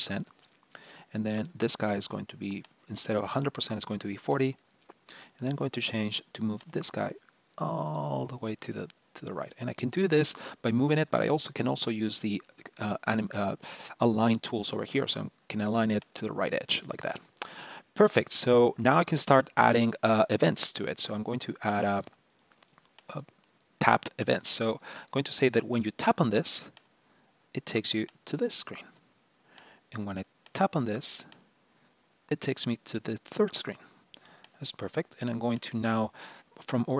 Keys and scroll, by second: 19.4 super+-.